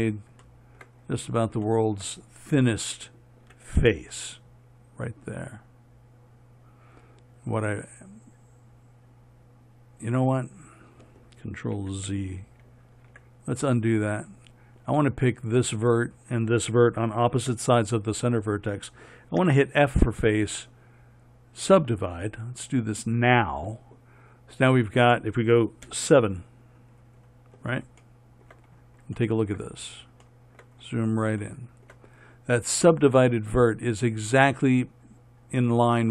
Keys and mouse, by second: 4.1 a, 12.1 ctrl+z, 15.7-19.8 right drag, 19.8 f, 23.3-26.2 drag, 26.2 KP_7.